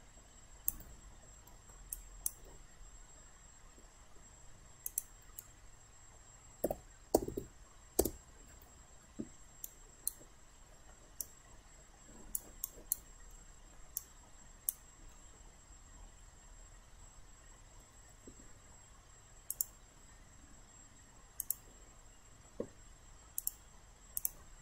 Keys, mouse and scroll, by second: 1.4 alt+middle click, 1.9 alt+click, 4.9 click, 6.7-7.3 typing, 8.0 Return, 9.6 alt+right click, 10.6 alt+middle click, 11.2 alt+right click, 12.6 alt+right click, 13.4 alt+middle click, 14.0 alt+right click, 15.1-17.8 alt+middle drag, 19.5-24.6 drag.